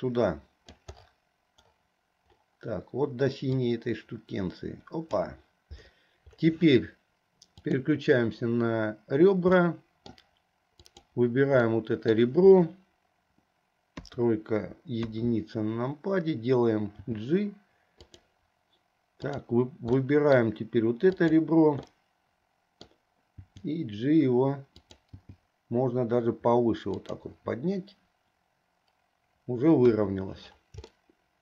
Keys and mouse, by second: 3.8-5.3 drag, 7.9 click, 9.7 middle click, 11.0 click, 11.8 middle click, 14.1 KP_3, 15.1 KP_1, 17.1 g, 20.1 middle click, 21.2 click, 22.0-23.1 drag, 22.0-23.1 right drag, 23.4 g, 25.1 g, 29.9 KP_1, 31.1 shift+click, 31.1 shift+right click.